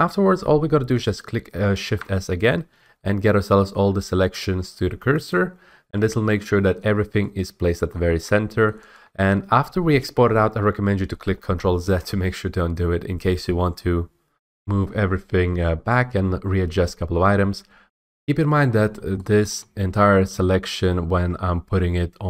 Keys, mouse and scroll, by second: 1.7 s, 5.2 click, 6.1-6.9 scroll, 7.8 middle click, 8.6 shift+middle click, 8.9-9.9 scroll, 14.3 F8, 17.1-17.5 scroll, 18.6 middle click, 18.7 middle click, 18.8 middle click, 19.5 shift+middle click, 19.7 s, 20.1 scroll, 20.4 s, 20.9-22.2 s.